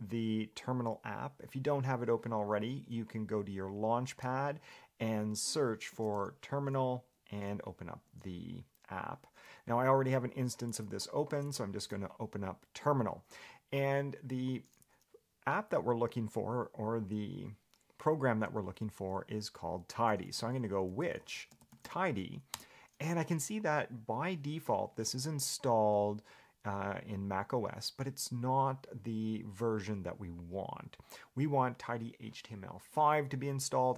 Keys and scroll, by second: 9.1 Escape.